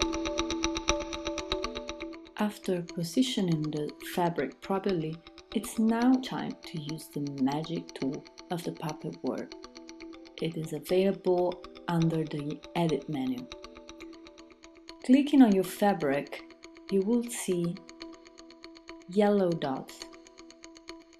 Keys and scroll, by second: 4.7 Return.